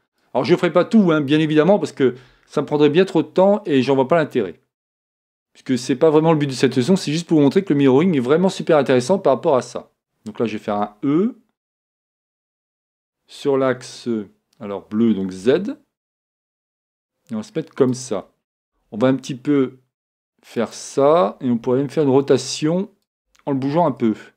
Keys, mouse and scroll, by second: 10.7 e, 11.6 e, 18.0-20.0 drag, 19.6 s, 20.7-22.5 drag, 21.7 r, 23.9 g.